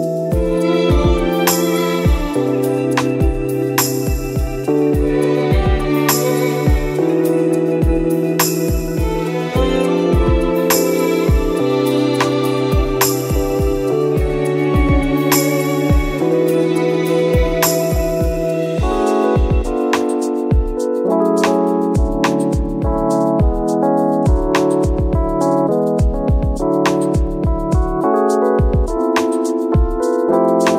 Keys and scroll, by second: 0.0 space, 0.1 ctrl+z, 1.1 space, 1.7 space, 2.4 space, 2.7 space, 10.7 space, 12.9 ctrl+-, 13.3 space, 14.9 ctrl+z, 27.5 ctrl+z, 28.5 ctrl+z.